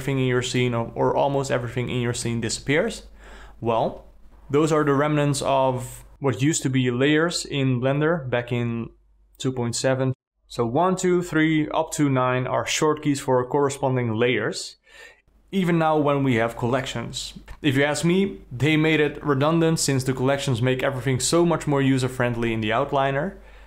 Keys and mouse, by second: 0.7 alt+middle click, 0.9 alt+drag, 1.1-2.4 alt+middle drag, 12.3 1, 12.9 2, 13.3 3, 14.7-17.0 typing, 18.0 ctrl+z, 18.4 ctrl+z, 18.8 ctrl+z, 19.2 ctrl+z, 20.4 ctrl+z, 21.3 ctrl+z, 22.0 ctrl+z, 22.7 ctrl+z, 23.6 ctrl+z.